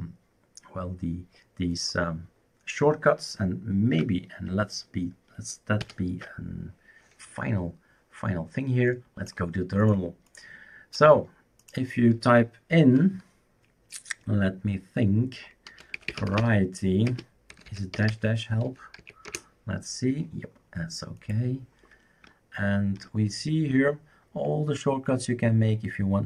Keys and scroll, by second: 5.8 ctrl+alt+t, 15.5-19.0 typing, 19.3 Return.